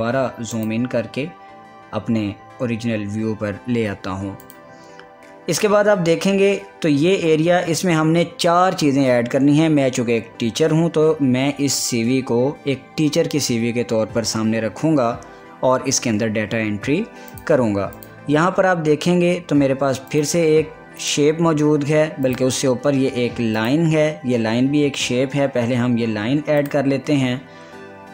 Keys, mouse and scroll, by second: 3.0 scroll up 1, 5.0 click, 5.7 scroll down 1, 9.0 scroll up 1, 17.9 click, 18.0 click, 18.7 click, 19.3 scroll up 1, 20.3 scroll down 1, 20.7 click, 27.3 click.